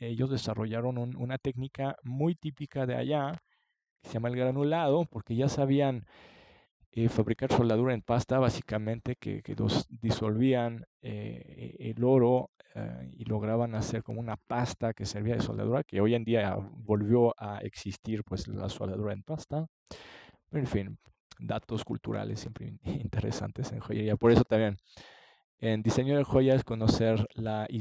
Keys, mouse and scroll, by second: 6.9-8.1 middle drag, 8.6 middle click, 9.7 middle click, 21.5-23.5 middle drag.